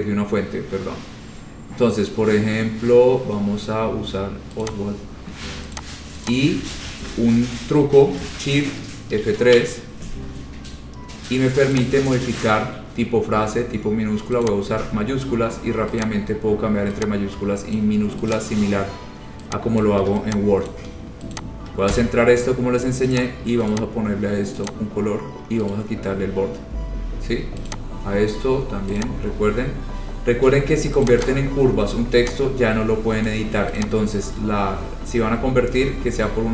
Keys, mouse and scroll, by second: 1.4-2.2 scroll, 2.5-3.9 scroll, 4.8 click, 5.9 click, 6.5 click, 6.9 ctrl+a, 9.4 F3, 12.0 click, 14.6 click, 16.3 click, 18.0 click, 18.5 click, 20.0 shift+click, 20.1 shift+click, 20.9 click, 21.5 shift+click, 22.1 c, 23.4 click, 23.9 click, 24.9 click, 25.1 shift+click, 25.9 right click, 26.5-27.3 scroll, 27.9 click, 29.2 click, 29.8-30.4 scroll, 31.2 click, 31.4 click, 33.4 click, 33.9 click, 34.4-34.8 scroll, 35.5 scroll.